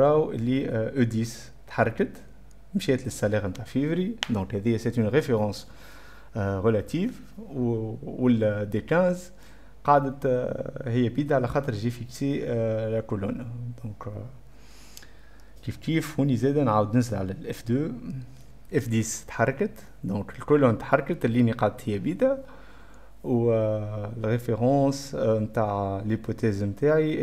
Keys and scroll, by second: 17.4 F2.